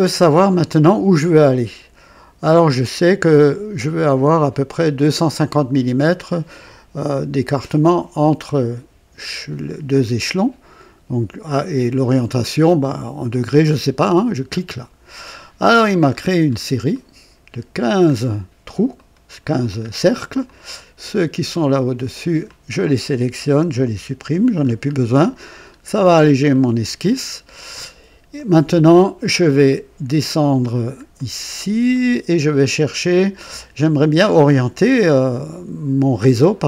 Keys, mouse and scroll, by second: 0.1 scroll down 1, 13.8 click, 15.3-16.7 scroll down 5, 16.8 right click, 18.0-18.4 scroll up 1, 18.6-19.5 right drag, 19.5-20.4 scroll down 2, 20.4-22.5 drag, 23.6 Delete, 23.8 Delete, 24.5-24.9 scroll up 1, 25.5 scroll up 1, 26.4 middle click, 28.2-28.8 right drag, 29.1 right click, 29.5 right click, 30.6-31.0 scroll down 1, 31.1 right click, 31.8 right click, 32.6 right click, 33.5 right click.